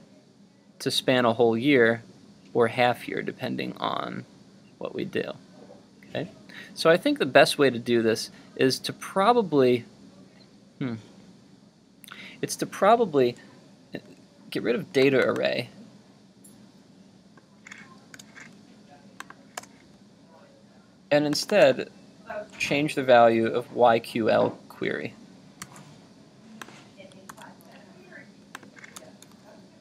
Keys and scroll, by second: 25.6 super+c, 27.5 super+v.